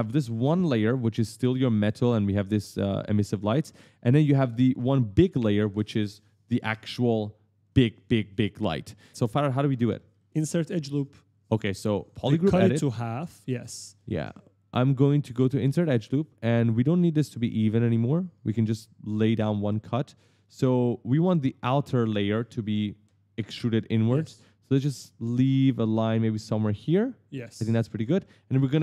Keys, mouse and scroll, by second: 3.3 middle click, 3.8 scroll down 1, 4.1 middle click, 9.2 right click, 9.7 right click, 11.9 click, 12.4 right click, 12.5 right click, 15.6 click, 17.2 click, 19.0-20.2 typing, 19.2 right click, 19.5 right click, 20.4 right click, 21.0 right click, 21.1 right click, 24.6 right click, 24.7 right click, 27.3 click, 27.9 s, 28.1 right click.